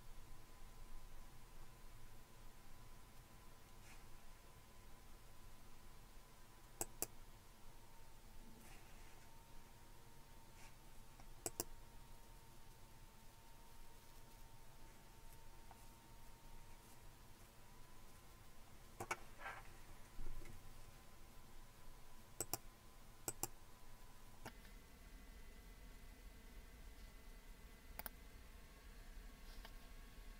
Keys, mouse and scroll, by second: 6.8-11.2 drag, 11.5-13.2 drag, 22.4 click, 23.3 click.